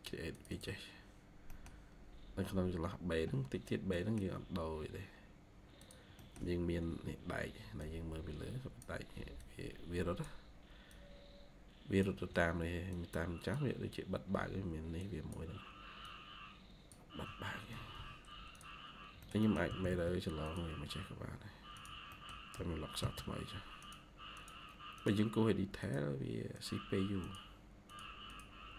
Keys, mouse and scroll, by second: 0.4 double click, 1.4 middle click, 1.8-3.1 scroll up 1, 3.1-3.8 scroll down 1, 3.8 middle click, 6.1 middle click, 7.1 ctrl+q, 7.7 ctrl+click, 7.7 ctrl+q, 17.6 Escape, 17.8 Escape, 19.1 middle click, 19.6 typing, 22.0 middle click, 22.4 typing, 28.2 double click.